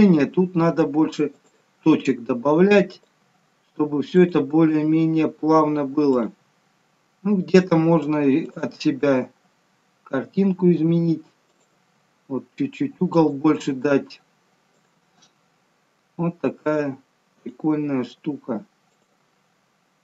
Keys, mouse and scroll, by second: 1.6 e, 3.1 e, 4.7 e, 6.4 e, 8.8 e, 11.7 e, 13.6 e, 15.1 e, 17.6 e, 19.1 e.